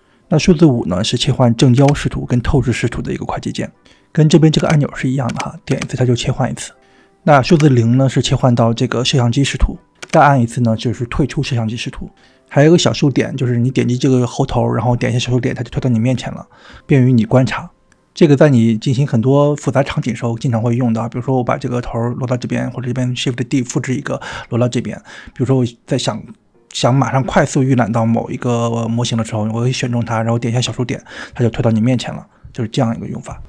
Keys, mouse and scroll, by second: 0.0-0.3 typing, 1.9 KP_5, 4.4 KP_5, 5.3 KP_5, 5.7 KP_5, 7.2 KP_0, 9.9 KP_0, 13.1 click, 15.7 KP_Decimal, 18.1-18.6 scroll down 4, 20.8 g, 22.8 click, 23.5 click, 24.2 click, 25.6 shift+d, 27.8 click, 29.1 click, 30.5 KP_Decimal, 32.2 KP_Decimal, 33.3 scroll down 3.